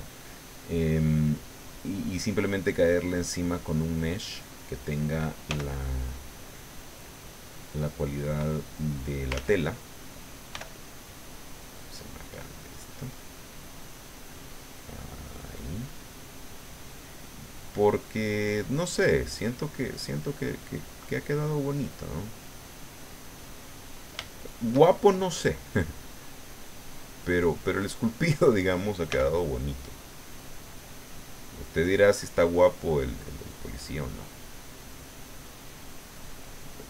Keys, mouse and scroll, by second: 0.5 click, 1.1 click, 2.0 click, 2.6 middle click, 3.5-4.6 middle drag, 5.5 f, 6.2 click, 7.0-9.4 drag, 9.3 ctrl+z, 10.5 f, 11.7 click, 12.5-15.7 drag, 16.2 click, 17.6-18.6 drag, 18.7 click, 19.4 click, 21.1-24.1 middle drag, 24.1 scroll up 1, 24.2 shift+middle click, 25.1-26.2 shift+middle drag, 26.3-27.7 drag, 27.8 click, 29.0 f, 29.9 click, 30.7 click, 31.3 click, 31.8 middle click, 32.5 middle click, 33.4-35.3 middle drag, 36.1 click.